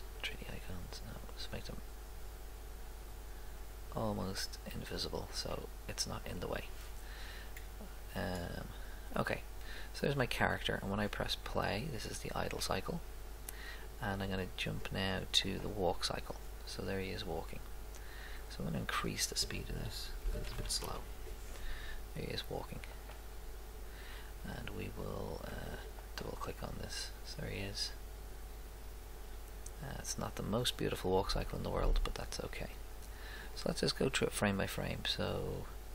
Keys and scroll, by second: 20.1-21.0 typing.